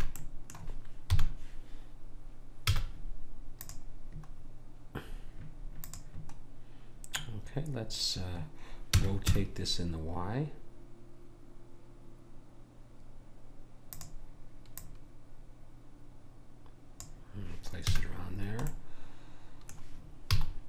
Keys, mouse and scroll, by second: 1.1 KP_1, 2.7 z, 5.1 middle click, 5.8 click, 12.1 r, 14.8 click, 18.0 a, 18.3-19.5 middle drag, 20.3 z.